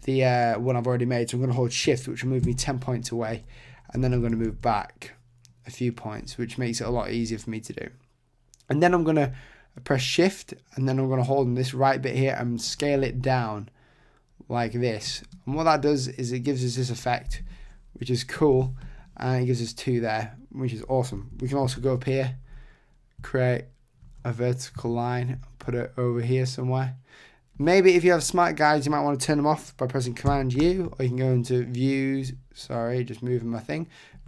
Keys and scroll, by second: 2.4 shift+Right, 3.9 Left, 21.6 shift+b, 30.6 super+u.